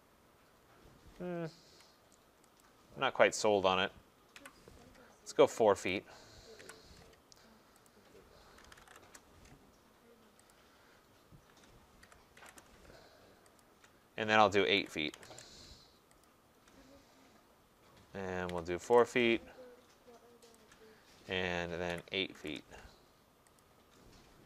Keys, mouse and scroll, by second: 1.6 Escape, 4.3 Delete, 5.9 click, 6.6 Delete, 7.9 click, 8.4-9.3 typing, 10.5 click, 11.8-12.5 typing, 13.6 shift+click, 14.5-15.3 typing, 16.2 shift+click, 18.2-19.0 typing, 21.6-22.4 typing, 23.6 typing.